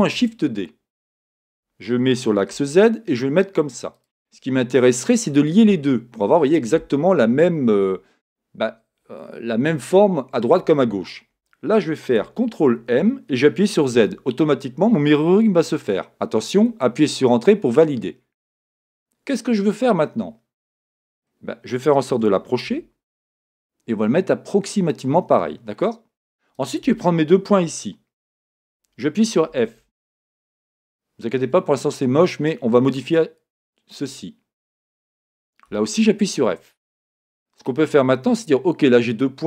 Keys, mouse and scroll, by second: 0.0-4.0 drag, 0.0 shift+d, 12.7 ctrl+m, 16.8 Return, 19.6-21.0 scroll up 1, 21.0-22.1 scroll down 1, 22.1 g, 25.0 click, 25.5 scroll up 1, 26.5 click, 28.5 shift+click, 29.5 f, 30.0 scroll down 1, 30.7-33.6 shift+middle drag, 32.2 scroll up 1, 33.6 click, 34.7 shift+click, 35.7 f, 36.0 scroll down 1, 36.6 scroll up 1, 37.6 click, 39.1 click.